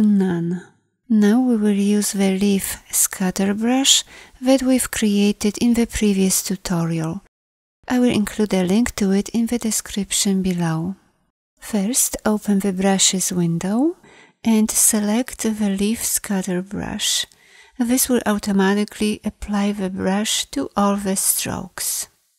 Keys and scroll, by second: 5.1 =, 6.0 b, 7.3 y, 9.7 y, 10.1 z.